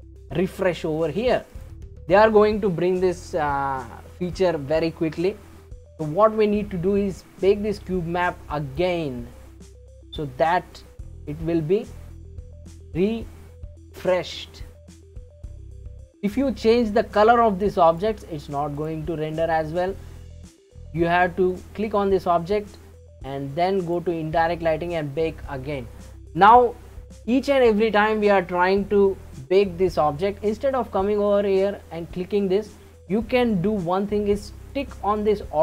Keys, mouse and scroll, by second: 1.5 click, 8.5-11.5 drag, 15.7 click, 17.9 click, 18.8 click, 21.5 click, 23.9 click, 34.7 click, 35.2 click.